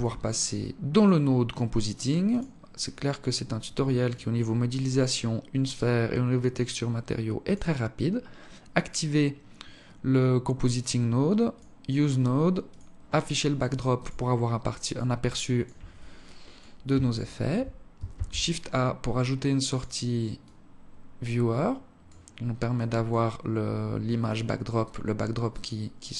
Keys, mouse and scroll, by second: 0.7 click.